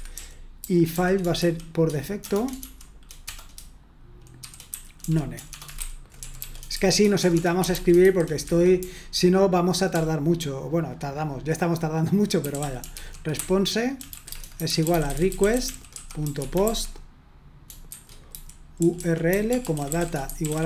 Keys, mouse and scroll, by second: 0.0-3.2 typing, 4.4-9.2 typing, 12.1-16.3 typing, 17.9-20.6 typing.